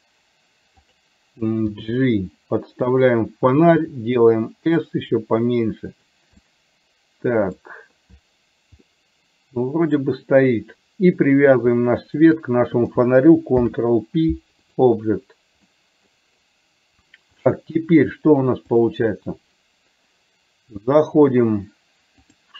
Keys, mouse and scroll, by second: 1.8 g, 4.4 s, 6.4-7.6 middle drag, 9.1-10.1 middle drag, 13.7 ctrl+p, 15.8 middle click, 17.6 click.